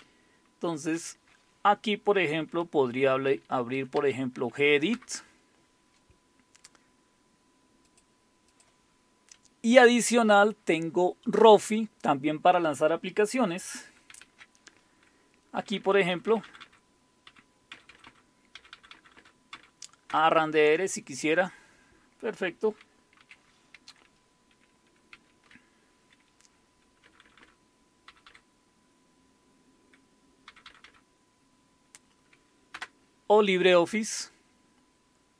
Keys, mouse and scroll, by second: 1.0 alt+super+d, 3.0-4.5 typing, 4.9 Return, 7.9-9.2 drag, 14.1 alt+super+r, 15.6 Down, 15.8 Down, 15.9 Down, 16.1 Down, 16.4 Down, 16.6 Down, 17.3 Up, 17.7 Down, 18.0 Down, 18.6 Down, 18.7 Down, 18.9 Down, 19.4 Down, 19.5 Down, 20.1 Return, 23.2 super+q, 25.1 alt+super+r, 27.0 Down, 27.2 Down, 27.4 Down, 28.1 Up, 28.2 typing, 30.5 typing, 30.7 Down, 32.7 Return, 32.9 typing.